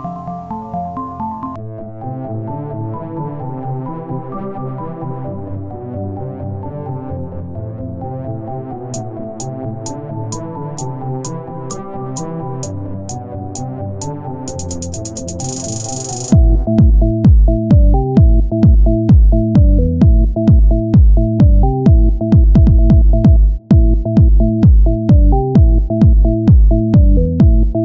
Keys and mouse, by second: 0.4 Tab, 1.8 middle click, 2.5-8.3 drag, 6.1 s, 10.3 c, 14.3 c, 16.5 z, 17.9 o, 18.3 s, 21.5 Tab, 23.7 middle click, 23.9 Tab, 24.2 middle click, 24.9-26.0 right drag, 27.7-27.8 right drag.